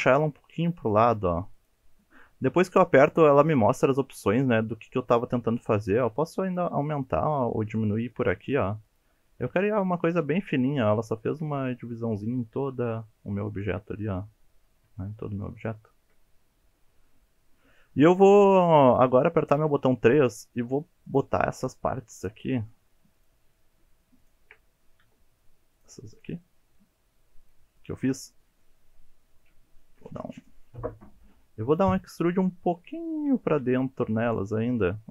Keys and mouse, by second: 1.5 click, 6.4 click, 6.9 click, 8.1 click, 8.4 click, 8.8 click, 10.6-11.3 shift+middle drag, 11.9-12.6 shift+middle drag, 13.1 shift+click, 13.5 shift+click, 14.9 shift+click, 15.4 shift+click, 15.9 shift+click, 19.1 click, 19.6 3, 20.5 shift+middle drag, 21.4-21.8 shift+middle drag, 22.5-22.9 shift+middle drag, 23.1 shift+click, 23.5-24.0 shift+middle drag, 24.2 shift+click, 25.1 shift+middle drag, 25.7 shift+drag, 26.4-26.7 shift+middle drag, 27.7 shift+click, 28.3-28.6 middle drag, 29.4 KP_1, 29.8 KP_Decimal, 31.0 shift+middle drag, 31.7-32.2 middle drag, 32.5 shift+middle drag, 33.3 shift+middle drag, 34.1-34.7 middle drag.